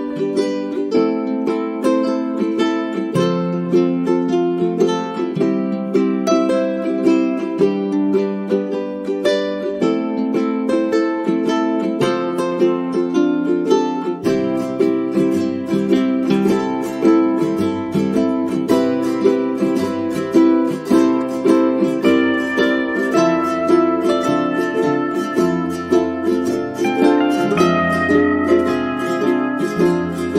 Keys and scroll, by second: 21.8 space, 23.7 space, 28.3 space.